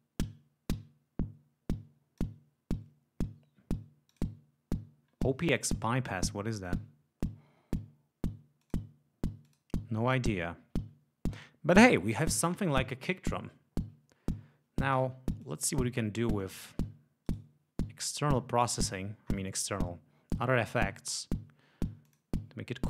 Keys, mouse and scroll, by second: 4.1 click, 8.6 click, 9.5 click, 15.4 click, 16.4 click, 17.3 right click, 18.7-19.5 scroll down 2, 22.1 click.